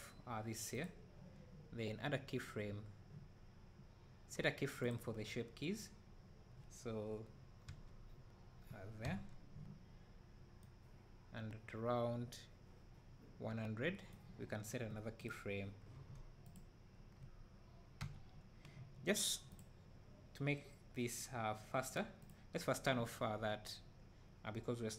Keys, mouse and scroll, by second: 0.8 click, 9.2 i, 10.7-16.5 right drag, 16.5 click, 18.1 i, 22.2 click.